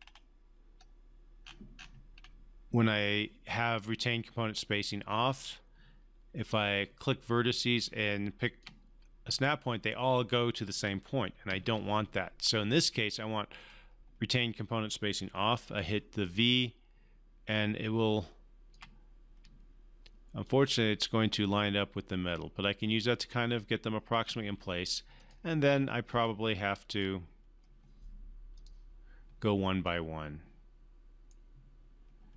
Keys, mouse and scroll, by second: 1.4 scroll up 1, 6.9-8.7 typing, 7.9 click, 10.9 typing, 11.4 ctrl+z, 13.6 click, 15.7-24.5 typing, 16.3 click, 20.4 click, 25.1 click, 25.2 click, 30.1-31.4 right drag.